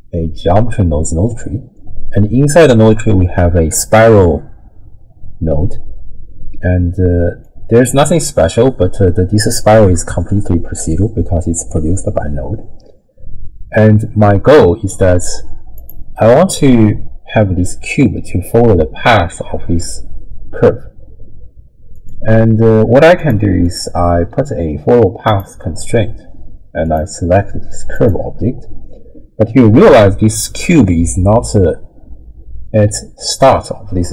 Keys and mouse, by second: 7.4-14.9 drag, 15.8 click, 22.0 click, 23.2 click, 23.7-25.4 drag, 26.8 click.